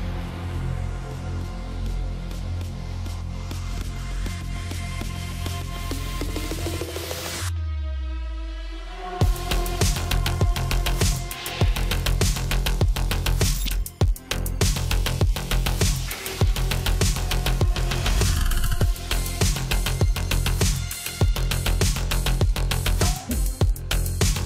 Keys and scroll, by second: 20.5-21.7 typing.